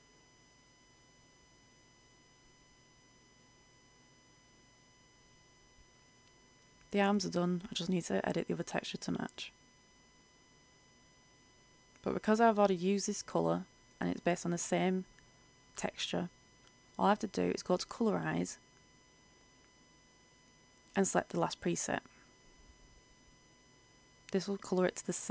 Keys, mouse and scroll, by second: 1.4 click, 1.9 Return, 3.7 click, 3.9 F8, 6.8-8.9 drag, 8.9 e, 10.1-11.7 drag, 14.3 shift+click, 15.6 ctrl+click, 16.4 ctrl+shift+click, 18.8-25.3 drag.